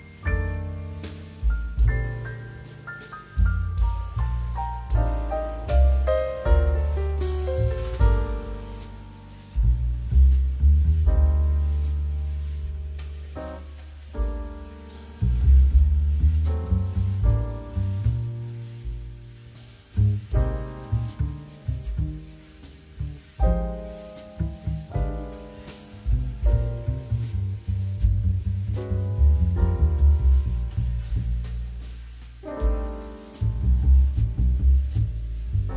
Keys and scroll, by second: 1.7 z, 5.5 g, 8.6 z, 19.1 z, 21.2 m, 24.6 q, 25.5 2, 27.8 9, 29.0-30.7 typing, 32.8 space, 33.8 space, 35.1 space.